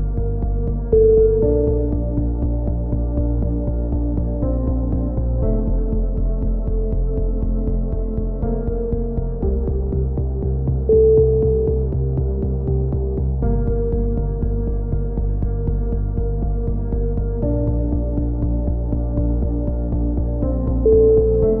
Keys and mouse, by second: 0.6 middle click, 0.6 g, 2.6 click, 2.7 c, 3.7 click, 4.3 g, 5.9 click, 6.3 a, 6.6 click, 6.8 middle click, 7.6 ctrl+r, 9.8 a, 10.2 z, 10.5 Tab, 11.5 click, 12.6-14.9 drag, 14.9 Tab, 15.1-17.9 middle drag, 18.1 e, 19.2 click, 19.8 s, 20.7-21.6 drag.